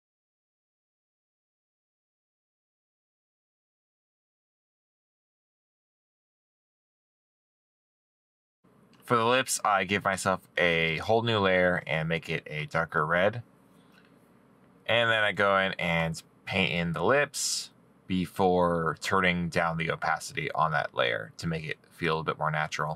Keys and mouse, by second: 1.8 right click, 3.1 middle click, 3.3 middle click, 4.0 right click, 4.4 middle click, 4.7 middle click, 4.9 right click, 5.1 right click, 5.4 right click, 8.1 right click, 17.2 middle click.